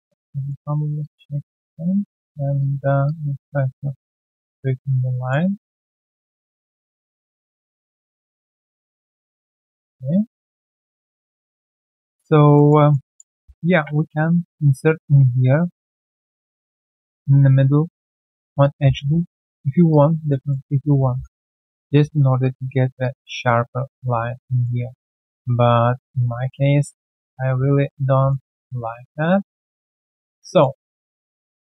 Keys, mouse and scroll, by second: 0.4 double click, 1.0 alt+click, 2.0 alt+click, 2.5 ctrl+click, 3.0 alt+click, 3.2 typing, 5.1 alt+middle click, 5.5 alt+scroll down 1, 6.1 alt+middle click, 7.3 double click, 7.6 alt+right click, 7.8 alt+click, 8.4 ctrl+click, 9.3 alt+middle click, 10.6 alt+middle click, 10.9 right click, 11.4 alt+scroll down 1, 11.7 alt+middle click, 11.9 alt+click, 12.2 alt+right click, 12.5 alt+middle click, 12.8 alt+right click, 13.0 alt+click, 13.7 ctrl+shift+x, 18.0 ctrl+click, 18.6 alt+click, 19.0 q, 19.2 right click, 19.6 scroll down 1, 19.9 alt+click, 20.2 alt+right click, 20.4 alt+middle click, 21.6 right click, 21.9 q, 22.7 alt+right click, 23.0 alt+click, 23.8 alt+click, 24.5 alt+middle click, 24.8 alt+click, 25.3 alt+click, 26.0 ctrl+z, 26.4 ctrl+z, 26.7 ctrl+z, 27.0 ctrl+z, 27.9 right click, 28.3 q, 28.5 scroll down 1, 29.4 alt+right click, 29.7 alt+click, 29.9 alt+middle click, 30.2 alt+scroll down 1, 30.4 alt+click, 31.0 alt+click, 31.2 alt+right click, 31.4 1, 31.6 alt+middle click, 31.7 alt+right click.